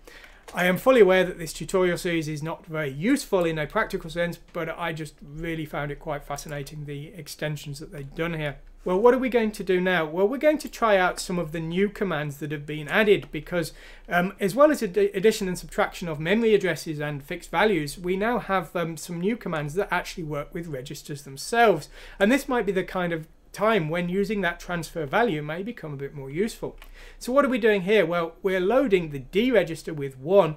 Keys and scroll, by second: 0.5 Return, 0.7 Escape.